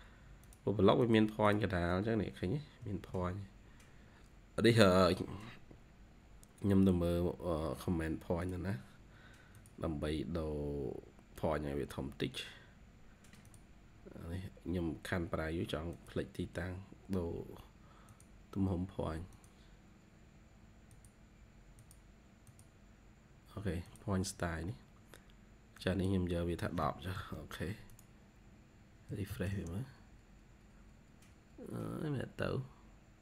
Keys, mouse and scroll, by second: 1.4 double click, 1.8-2.7 scroll up 7, 2.7 Escape, 3.0 Escape, 3.5-4.5 scroll down 1, 26.6-27.1 typing, 28.8-29.7 typing, 30.5-31.2 scroll down 3, 30.8-31.2 typing.